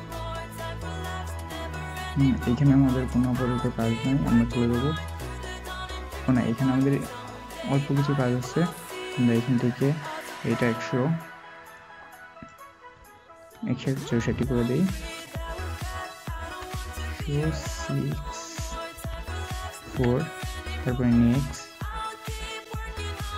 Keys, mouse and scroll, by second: 16.4 typing, 18.9 typing.